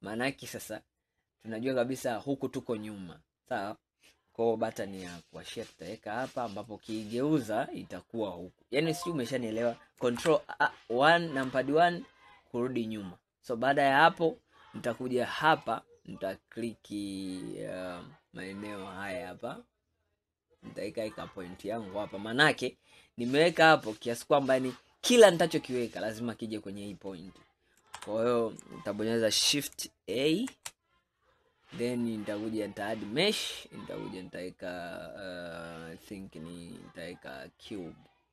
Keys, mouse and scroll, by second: 4.1-5.6 scroll up 2, 6.8-9.9 middle drag, 10.2 ctrl+KP_1, 11.9-12.5 scroll down 4, 12.9-13.6 scroll up 5, 14.1 scroll down 3, 15.6-17.3 drag, 17.3 scroll up 2, 21.1 click, 21.8 scroll down 2, 22.7-25.8 middle drag, 28.0 ctrl+KP_1, 30.6 shift+a.